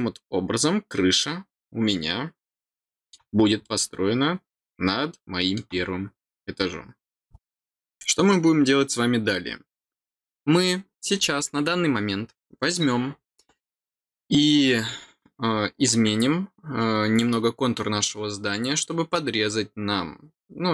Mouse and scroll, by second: 3.6-5.5 middle drag, 7.3-20.7 middle drag.